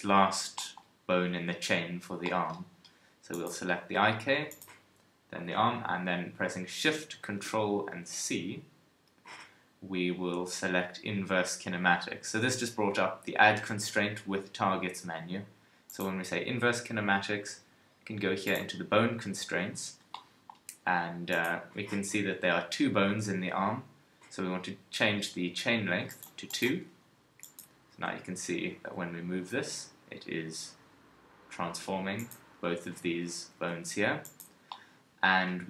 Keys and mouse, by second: 18.4-25.9 drag, 26.1-27.4 drag, 27.4 right click, 27.9 g, 32.5 KP_1, 33.5 g.